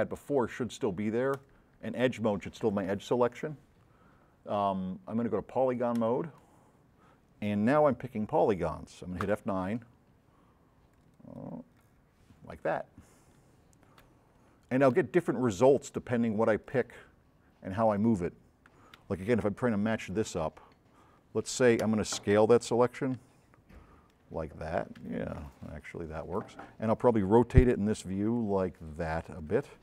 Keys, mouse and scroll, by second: 1.4 click, 6.0 click, 9.2 F9, 11.1 click, 14.1 c, 15.0 v, 15.8-16.8 drag, 17.0 middle click, 17.5 middle click, 18.0-19.2 drag, 23.1 x, 23.9-25.3 drag, 27.6 c, 28.4-29.5 drag, 29.7 v.